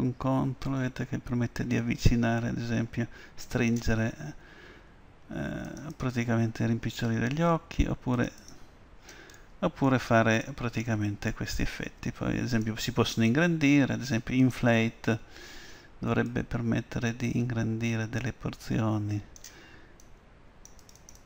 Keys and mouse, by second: 5.8-7.9 drag, 8.2-10.4 drag, 9.4-12.6 middle drag, 12.6-14.5 drag, 16.4-18.2 drag, 20.1-21.2 drag.